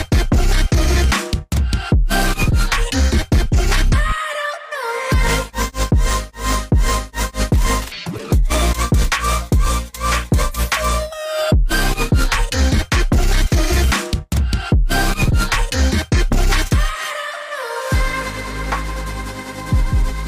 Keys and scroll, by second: 4.7 v, 5.0 a, 7.6 v, 8.4 v, 12.1 ctrl+9, 12.8-16.2 typing, 12.9 Tab, 13.0 Tab, 13.5 Tab, 16.1 Return, 18.7 alt+Tab.